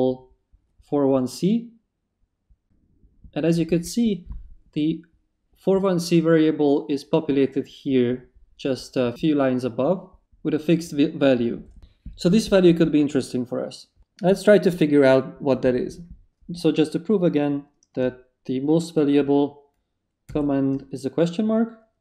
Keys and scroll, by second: 20.3 shift+/.